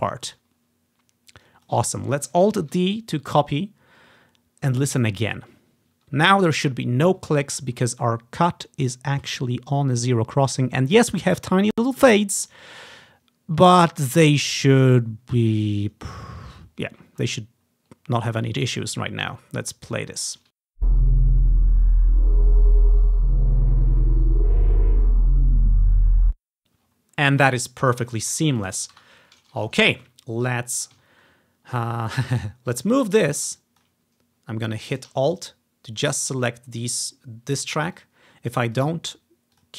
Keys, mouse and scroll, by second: 1.6-4.7 drag, 2.7 alt+d, 4.0 ctrl+scroll up 2, 5.4-6.5 drag, 7.7-9.0 ctrl+scroll up 1, 17.1-18.9 scroll down 1, 18.9-19.5 scroll up 2, 19.7 ctrl+scroll down 1, 20.1 ctrl+scroll up 1, 20.7 space, 26.2 space, 26.9 ctrl+scroll down 2, 27.9 ctrl+scroll down 2, 28.3 click, 29.1 Delete, 29.8-30.2 ctrl+scroll up 1, 32.0-32.4 scroll up 1, 32.4 scroll down 1, 32.8-34.4 drag, 34.1 scroll up 1, 34.5 scroll down 2, 34.8 click, 35.4 alt+click, 37.1 click, 38.0-39.7 drag.